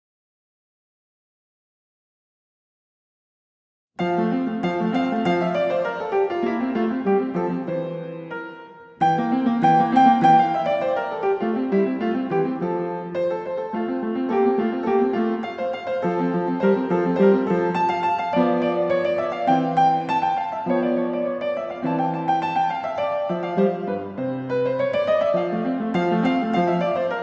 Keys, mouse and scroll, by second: 1.8 click, 4.5-5.0 typing, 5.4 Return, 7.0-7.7 scroll, 7.8 scroll, 9.5 click, 12.1-12.4 scroll, 14.5 click, 15.7-16.7 scroll, 17.5 click, 18.6 click, 19.5 click, 20.8 middle click, 21.0 middle click, 21.1 middle click, 21.7 middle click, 21.8 middle click, 21.9 middle click, 22.2 middle click, 22.7 right click, 25.1 click, 26.0 n.